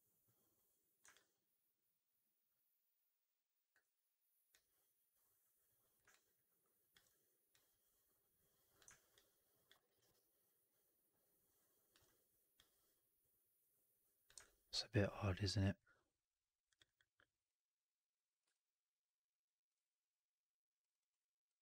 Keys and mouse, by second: 1.6-3.6 alt+drag, 4.4-5.9 drag, 6.0 alt+click, 9.0 alt+click, 9.6 alt+right click, 9.8 alt+right click, 10.0-11.8 alt+drag, 14.3-15.7 alt+drag, 20.7 click, 20.9 click, 21.4 click, 21.5 click.